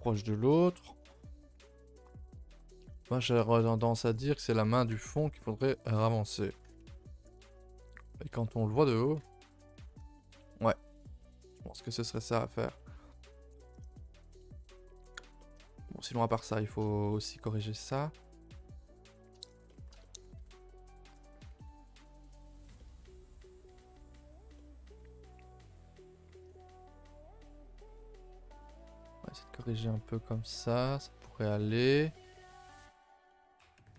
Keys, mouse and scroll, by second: 0.1-3.2 middle drag, 4.1 click, 4.4 a, 4.6 a, 5.3-7.2 middle drag, 7.6 middle click, 9.2 KP_7, 10.2-10.9 shift+middle drag, 10.9 scroll up 2, 11.2-15.6 middle drag, 15.6 scroll up 1, 15.9-16.3 middle drag, 16.3 click, 16.6 shift+middle drag, 16.8 scroll up 1, 17.1-19.5 middle drag, 19.5 shift+click, 19.7-20.3 shift+middle drag, 20.3 r, 21.4 g, 22.8-24.2 middle drag, 24.2-24.6 scroll down 1, 24.6-26.3 middle drag, 26.3 r, 27.8-29.2 middle drag, 29.2 a, 29.3 a, 29.5-31.2 middle drag, 31.2-31.5 scroll up 1, 31.5-32.2 middle drag, 32.2 click, 32.4 shift+middle drag, 32.6-33.1 scroll up 1, 33.1 click, 33.3-33.8 middle drag, 33.8 r.